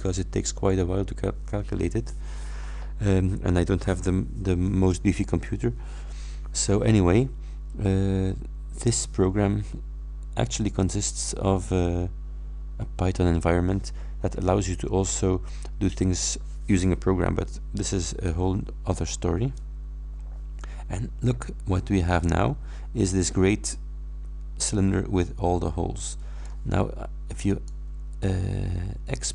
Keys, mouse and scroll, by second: 19.3-25.4 scroll up 4, 19.9 middle click, 25.4-26.7 middle drag, 27.6 click.